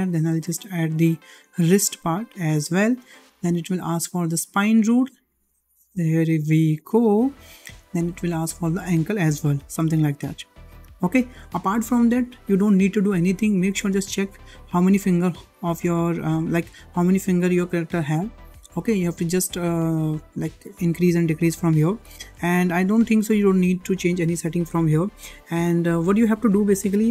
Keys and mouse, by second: 0.9-2.6 drag, 3.1-3.5 shift+middle drag, 4.7-6.9 drag, 7.2-7.7 shift+middle drag, 8.4-10.9 drag, 18.8-19.2 middle drag.